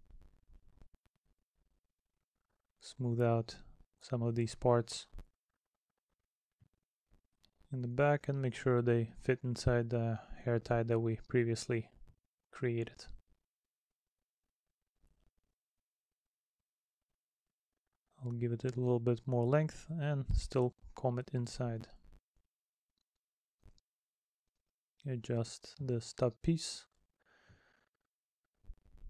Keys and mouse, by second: 2.1 middle click, 3.4 middle click, 5.7 middle click, 6.4 middle click, 8.2 middle click, 11.1 middle click, 15.8 middle click, 17.0 middle click, 18.3 middle click, 20.8 middle click, 21.8 middle click, 22.6 middle click, 24.0 middle click, 24.7 middle click, 27.5 middle click.